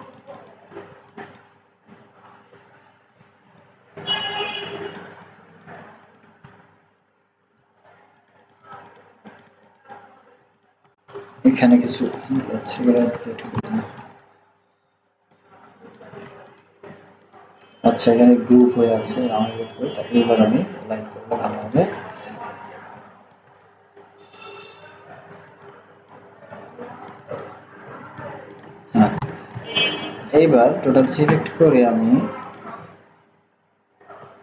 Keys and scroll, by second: 16.2 ctrl+z.